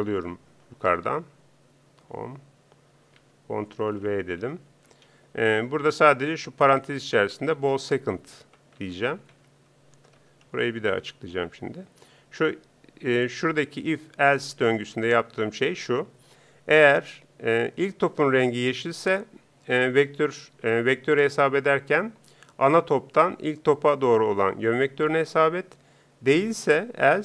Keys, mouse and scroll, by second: 13.8-27.2 drag.